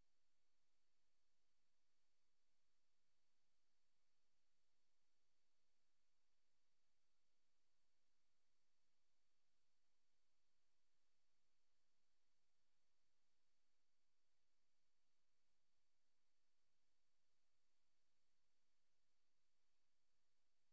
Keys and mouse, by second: 0.5 click, 1.0 click, 2.1 click, 2.8 click, 3.4 click, 3.7 click, 4.0 click, 5.0 click, 5.4 click, 6.0 click, 9.9 click, 11.8 click, 12.5 click, 15.7-18.4 drag.